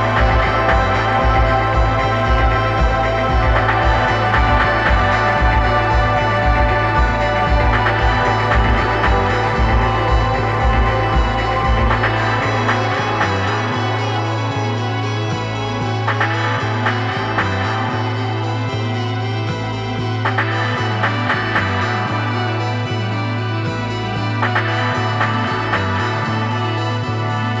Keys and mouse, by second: 18.8 middle click, 22.3-24.3 middle drag.